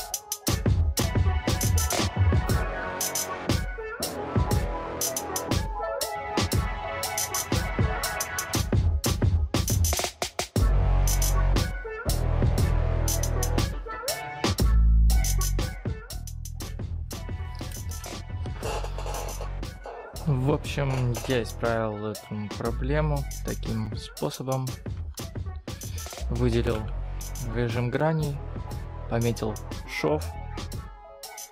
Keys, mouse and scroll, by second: 24.3 click, 24.9 Tab, 25.5-26.6 scroll up 7, 26.6 3, 27.8 click, 30.6 click.